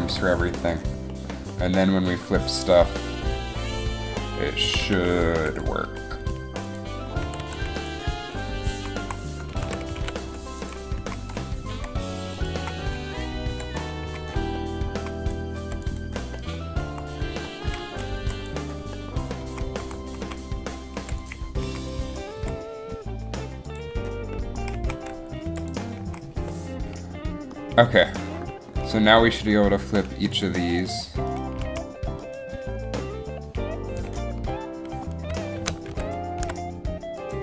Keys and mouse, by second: 0.2 i, 4.2 click, 4.8 a, 5.0 a, 5.4 i, 7.4 a, 7.6 a, 7.7 i, 9.1 Up, 9.8 a, 10.3 a, 11.0 i, 11.2 Up, 11.8 i, 12.8 Up, 13.6 i, 14.2 Up, 14.8 Up, 17.0 Up, 18.3 Up, 18.9 i, 19.6 Up, 20.0 Up, 20.4 Left, 20.4 Down, 21.1 i, 21.8 Up, 22.5 i, 23.8 Up, 24.9 Up, 26.2 Up, 30.0 Up, 31.8 a, 35.7 ctrl+c, 36.1 ctrl+shift+v.